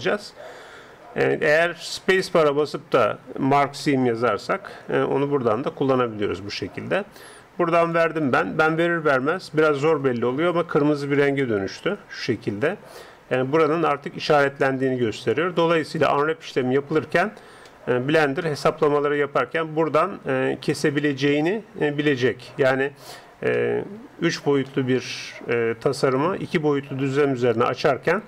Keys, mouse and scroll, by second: 2.6 space, 8.9-11.7 middle drag, 11.5 a, 17.7-20.1 middle drag, 23.5-26.6 middle drag.